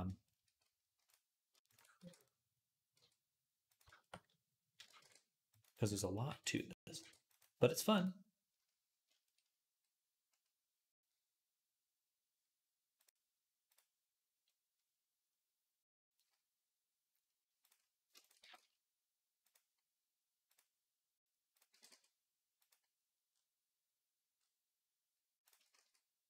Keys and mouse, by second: 1.5 ctrl+click, 1.8 e, 3.5 e, 4.8 ctrl+r, 6.1 ctrl+r, 6.8 ctrl+r, 12.9-16.0 drag, 18.2 g, 20.4 click, 21.3-26.2 middle drag, 21.5 g, 25.6 shift+s.